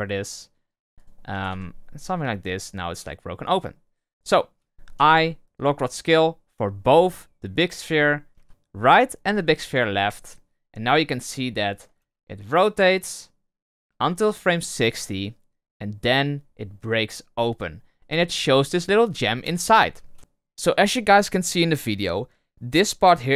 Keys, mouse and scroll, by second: 0.9 right click, 1.3 r, 2.9 right click, 3.4 right click, 4.9 i, 7.8 right click, 8.3 i, 9.2 i, 11.0-11.9 drag, 11.9 space, 19.2 space, 19.3 space, 20.1 space.